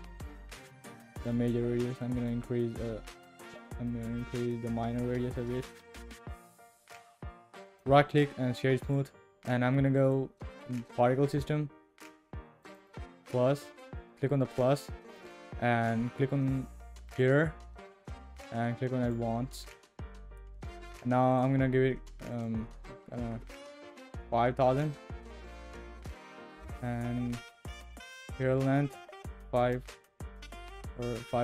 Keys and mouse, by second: 1.8-4.1 shift+drag, 7.8-9.0 drag, 10.0 click, 12.6 click, 17.1 click, 19.0 click, 21.3-24.9 drag, 27.9-31.4 drag.